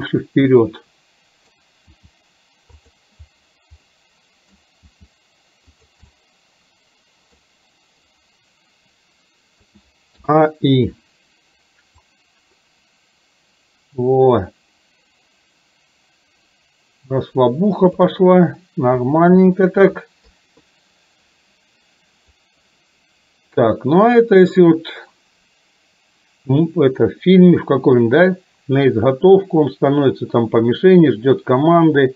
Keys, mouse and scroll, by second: 2.0 g, 3.9-4.6 middle drag, 4.9 g, 6.1-7.4 middle drag, 9.6 a, 10.3 i, 12.0-18.0 drag, 19.0 KP_2, 20.3 KP_3, 22.4-32.1 drag.